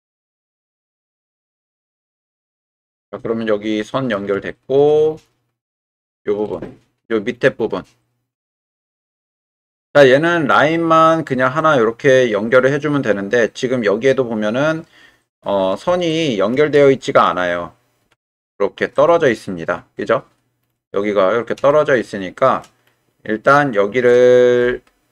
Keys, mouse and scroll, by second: 0.2-1.2 drag, 1.2 middle click, 2.4-4.1 middle drag, 4.5 shift+middle click, 5.8 middle click, 6.7 shift+middle click, 7.9-9.0 middle drag, 16.1 shift+click, 18.0 g, 18.1 x, 18.9 click, 21.7 shift+click, 22.6 middle click.